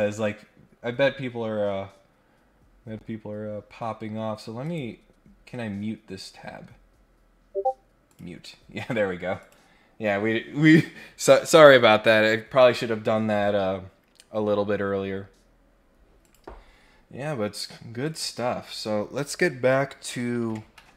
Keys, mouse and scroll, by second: 0.9 scroll up 1, 4.6 right click, 8.0 click, 9.4 click, 16.2 click, 17.5 click, 18.0 click.